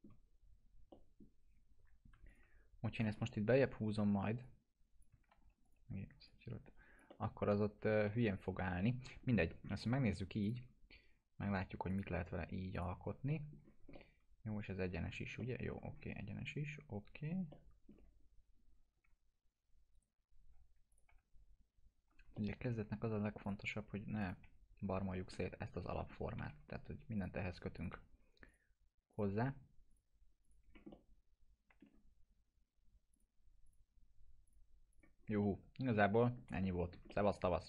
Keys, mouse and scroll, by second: 2.2 ctrl+click, 3.2 alt+middle click, 3.4 e, 4.4-5.0 click, 5.3 ctrl+z, 5.6 ctrl+click, 6.2-7.7 click, 7.0 alt+middle click, 8.2 ctrl+z, 8.7-9.4 alt+middle drag, 10.4 click, 13.3 alt+middle click, 13.5 scroll down 1, 13.9-15.1 alt+middle click, 15.0-15.3 alt+scroll down 2, 15.3 alt+middle click, 15.9-17.1 scroll up 2, 17.1 scroll up 1, 17.5-18.1 alt+middle click, 18.1-18.7 scroll up 1, 19.0 1, 19.9 right click, 20.9 click, 21.0 F3, 22.1 scroll up 1, 22.3 alt+middle click, 23.4 click, 24.4 F3, 24.8 scroll down 1, 25.1 alt+middle click, 25.9 middle click, 26.4 F3, 27.1 click, 27.9 F3, 28.4 click, 30.6 scroll down 1, 30.9-31.8 alt+middle click, 32.1 scroll up 1, 33.1 click, 35.1 scroll down 1, 35.4-36.9 alt+middle click, 36.9 scroll down 1, 37.0-37.6 alt+middle click.